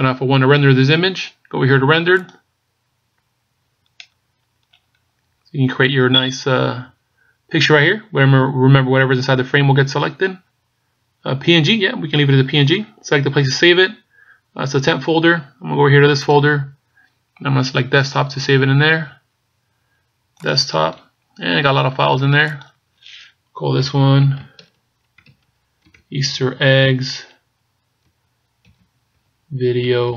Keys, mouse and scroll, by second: 2.9 click, 4.6-5.3 scroll down 3, 5.3-6.0 scroll down 6.